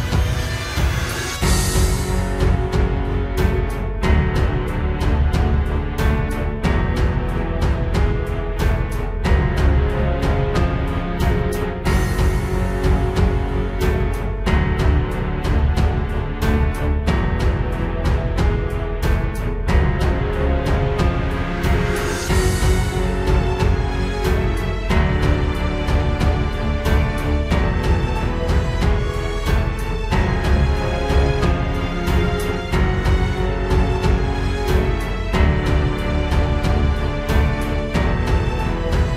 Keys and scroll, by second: 3.0 ctrl+space, 6.7 ctrl+space, 8.4 ctrl+z, 13.2 ctrl+space, 13.9 ctrl+z, 21.1 ctrl+space, 22.0 ctrl+space, 24.3 ctrl+space, 31.8 ctrl+space, 32.6 ctrl+s, 33.9 ctrl+z, 36.8 ctrl+g, 38.3 ctrl+g.